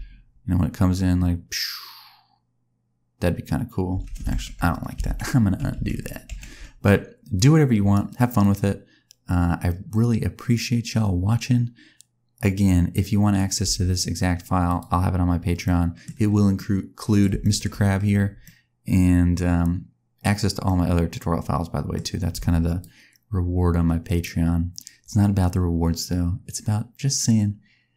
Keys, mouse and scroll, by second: 3.9 space, 4.3 ctrl+z, 5.0 ctrl+z, 5.7 ctrl+z, 6.3 ctrl+z, 7.3 click, 8.3 click, 13.6 space, 14.6 click, 15.6 middle click, 16.1-16.6 scroll up 3, 16.5 middle click, 17.3 shift+middle click, 18.4 middle click, 20.6 middle click, 22.3 space, 22.3 scroll down 1, 22.7 click.